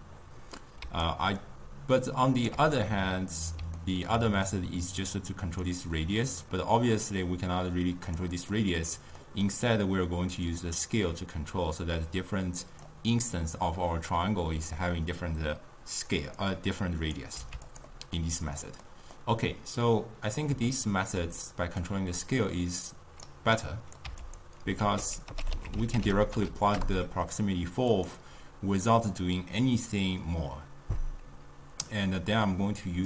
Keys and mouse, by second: 0.9 d, 1.1 right click, 2.6 d, 2.9-4.6 middle drag, 4.6-8.6 drag, 8.6-10.5 middle drag, 10.5-13.6 drag, 16.4-17.9 drag, 18.2-21.9 middle drag, 21.9-24.5 drag, 24.9 ctrl+a.